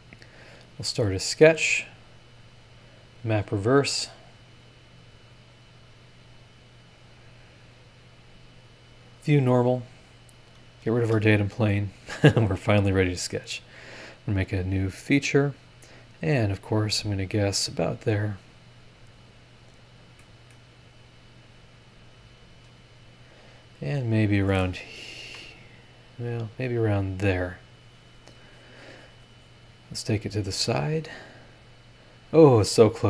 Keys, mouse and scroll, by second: 0.2 click, 1.2 click, 2.8 click, 3.6 scroll down 1, 4.5 click, 5.4 click, 5.8 click, 6.4 click, 8.6 click, 9.4 scroll up 1, 10.5 click, 11.0 space, 13.3 click, 13.9 scroll up 1, 15.7 click, 15.9-17.5 middle drag, 17.5 click, 19.5 click, 19.8 middle click, 24.1-25.2 drag, 25.2 Escape, 26.0-28.2 drag, 30.4 click, 30.9 scroll down 1, 31.7 scroll up 1.